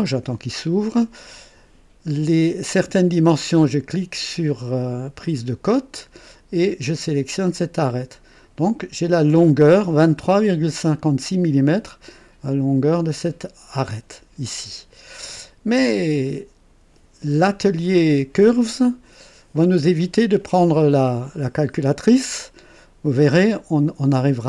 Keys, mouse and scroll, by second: 5.2 click, 7.8 click, 9.0-9.3 scroll up 1, 16.0 click, 20.8-21.3 scroll down 2, 22.1-24.4 drag.